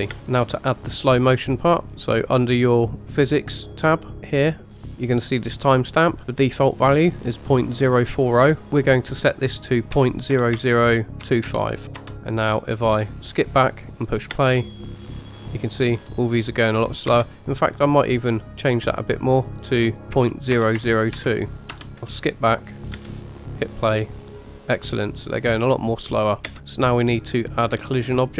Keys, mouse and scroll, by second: 0.1 space, 0.6-1.2 scroll up 2, 1.9-3.0 scroll up 2, 3.0-4.8 scroll up 1, 4.8 scroll up 2, 4.9-6.2 scroll down 4, 8.6-12.0 drag, 10.5 KP_0, 13.2 click, 14.3 space, 16.0-16.3 scroll up 2, 16.8-18.4 scroll down 2, 17.2 space, 19.5-21.9 drag, 20.7 KP_0, 22.0 click, 22.9 space, 25.5 middle click, 26.6 space, 27.3 click, 27.9-28.3 middle drag.